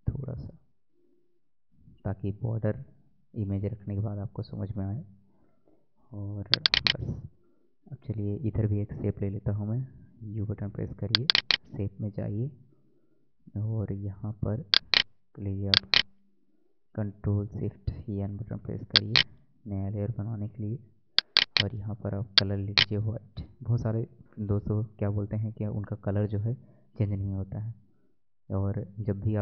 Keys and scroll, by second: 4.0 Left, 17.7 ctrl+shift+n.